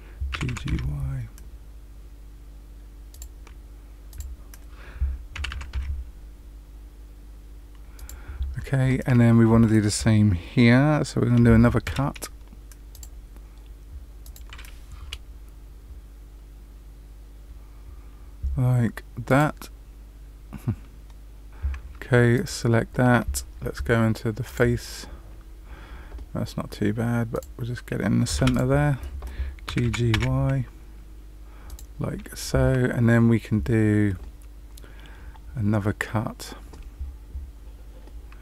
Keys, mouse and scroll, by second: 0.3 g, 4.0 click, 5.3 g, 11.8 k, 22.3 click, 24.4 click, 25.2 scroll up 2, 27.3 click, 28.3 2, 28.5 click, 29.6 g, 38.2 scroll up 1.